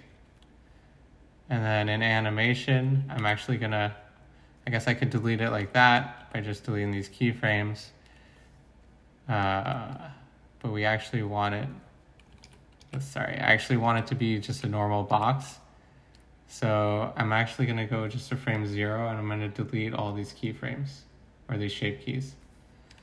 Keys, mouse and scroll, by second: 3.2 a, 5.6 x, 6.2 x, 12.4 ctrl+z, 12.8 ctrl+z, 13.8 ctrl+z, 14.5 ctrl+z, 15.1 ctrl+z.